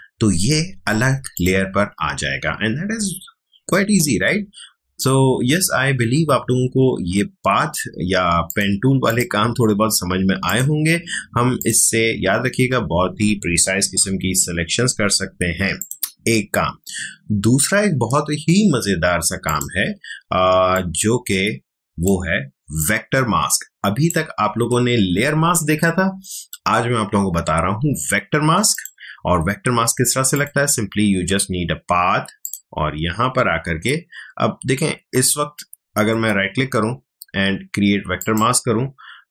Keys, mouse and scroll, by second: 1.3 click, 8.4 click, 14.0 ctrl+j, 15.7 click, 19.4-26.7 drag, 28.7 click, 36.1 right click, 38.1 click, 38.3 click.